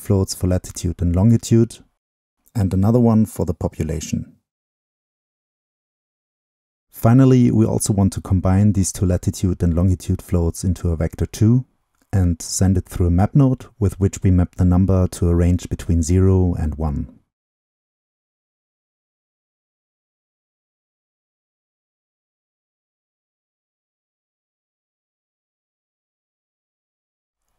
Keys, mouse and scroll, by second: 0.2-1.5 drag, 1.5 ctrl+b, 1.6-2.2 drag, 2.2 ctrl+c, 3.2 ctrl+v, 3.8 click, 12.5 click, 14.3 click, 16.5 click, 19.9-20.6 middle drag, 21.0 click, 21.0-22.0 scroll down 2, 22.0 middle click, 22.2-24.0 drag, 25.3-27.5 drag.